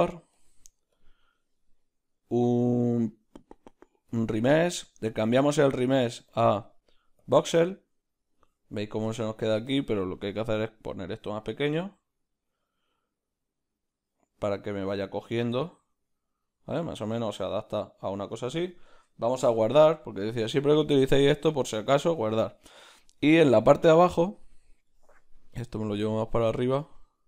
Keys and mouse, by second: 4.2-9.2 drag, 9.2-10.6 shift+middle drag, 10.6-27.2 drag.